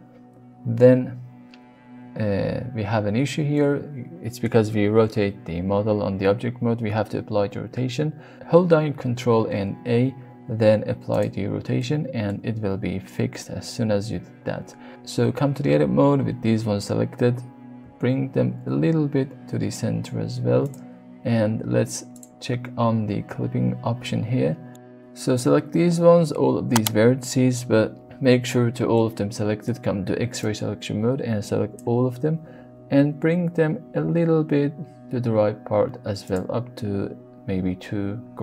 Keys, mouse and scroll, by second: 0.0 click, 3.5 middle click, 5.0 Tab, 9.4 ctrl+a, 11.8-12.2 middle drag, 17.8 x, 20.6 click, 22.1 click, 23.9 g, 24.7 right click, 25.3-25.7 middle drag, 26.0 alt+click, 26.5 click, 27.8 shift+middle click, 28.3 alt+z, 28.9 middle click, 30.4-31.8 drag, 32.8 g, 33.1 x, 36.2 click.